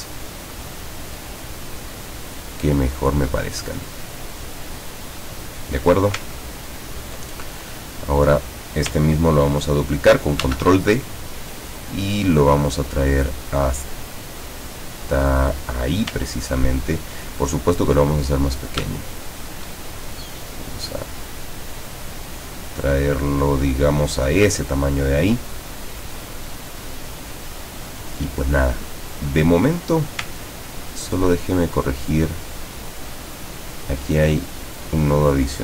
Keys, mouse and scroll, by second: 1.0-3.4 drag, 4.6-6.0 drag, 6.5-7.1 ctrl+scroll down 2, 7.9 click, 10.4 ctrl+d, 11.7-16.0 ctrl+drag, 16.5-17.0 ctrl+scroll up 4, 19.8-24.6 ctrl+shift+drag, 25.5-26.1 ctrl+scroll down 4, 29.9 click, 30.9-31.6 ctrl+scroll up 2, 32.1 ctrl+click, 33.4 click, 34.6 click.